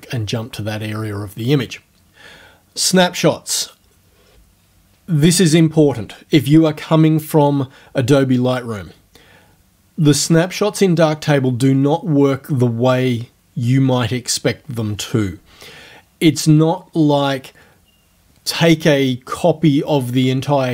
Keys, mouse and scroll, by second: 3.6 click.